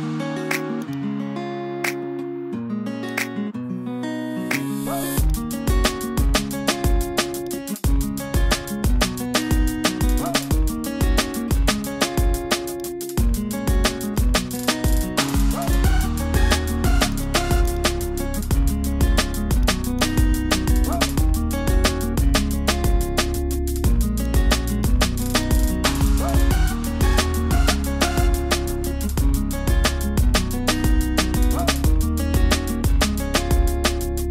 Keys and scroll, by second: 2.4 super+t, 6.7 super+t, 9.4 super+t.